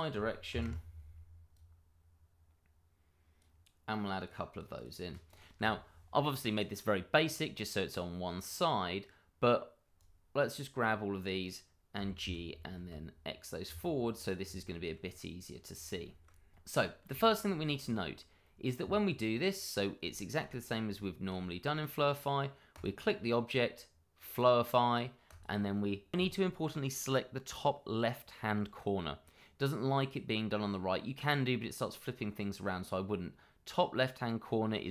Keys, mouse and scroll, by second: 0.5 0, 0.6 Return, 1.5 click, 4.6 click, 4.6 double click, 5.2 click, 6.3 middle click, 9.9 click, 10.9 middle click, 11.9 g, 12.2 y, 12.7 x, 14.2 click, 14.6 shift+middle click, 15.7 scroll down 1, 16.0 shift+middle click, 16.7 g, 16.8 y, 17.4 click, 17.6 shift+middle click, 17.7 scroll up 1, 17.9 middle click, 18.2 shift+middle click, 18.2 middle click, 18.3 shift+middle click, 18.6 click, 19.0 middle click, 20.1 shift+middle click, 20.4-21.0 shift+scroll up 2, 21.0 shift+middle click, 22.7 click, 27.3-29.3 scroll down 1.